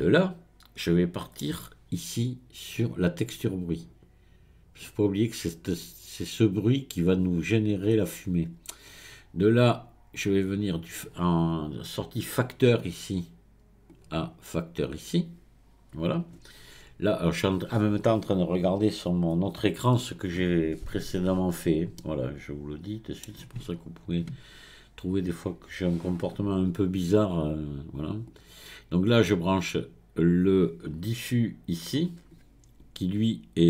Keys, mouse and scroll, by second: 3.8 click, 9.7 click, 13.9 click, 28.3 click.